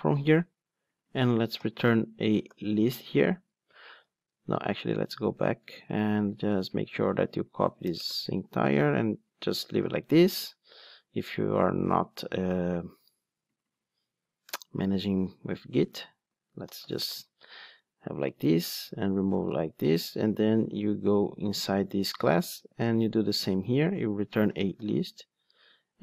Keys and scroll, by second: 2.8 Return, 4.0 super+z, 4.9 super+z, 6.9 super+c, 9.6 super+/, 20.7 super+b.